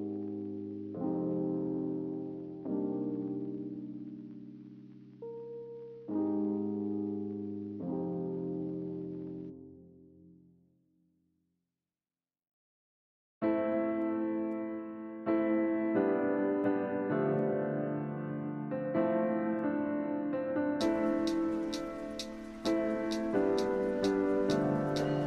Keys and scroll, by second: 17.0 5.